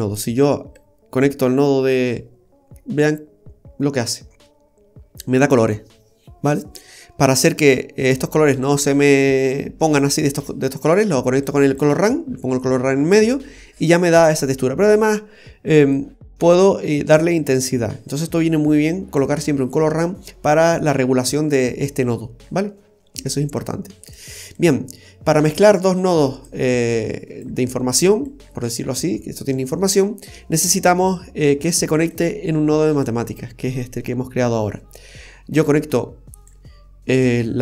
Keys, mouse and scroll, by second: 0.7 click, 3.6-4.1 scroll up 1, 4.1 scroll down 1, 4.4 middle click, 8.6 click, 11.4 click, 15.9 click, 23.6 click, 24.5 click, 26.0 click, 26.9 click, 28.2 click, 31.1 click, 35.6 click.